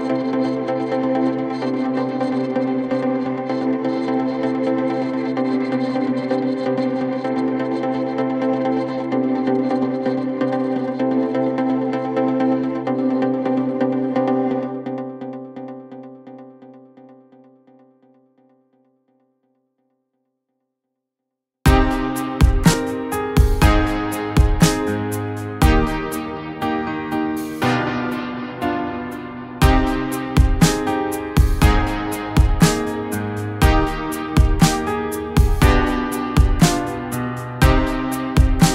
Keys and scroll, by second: 9.4 g, 15.8 F3, 26.7 Delete, 28.6 c, 29.6 shift+F2, 29.8 Escape, 34.9 Delete, 36.4 F3, 36.7 Escape.